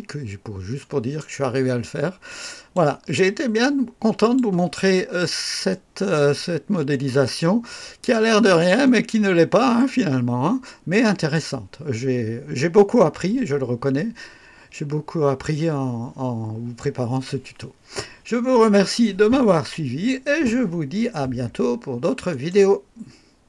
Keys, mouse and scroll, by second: 0.0-0.4 scroll down 1, 0.7 right click, 1.7 scroll down 1, 2.2 click, 3.1-4.5 drag, 4.9 scroll up 2, 5.6-6.3 right drag, 8.0 scroll up 2, 8.8-9.9 right drag, 22.2 right click.